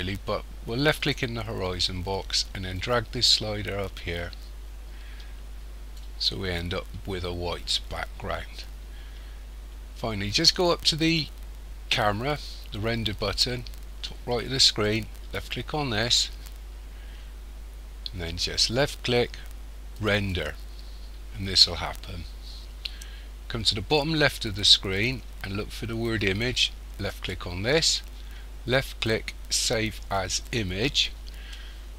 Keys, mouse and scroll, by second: 1.1 click, 15.4 click, 20.0 click.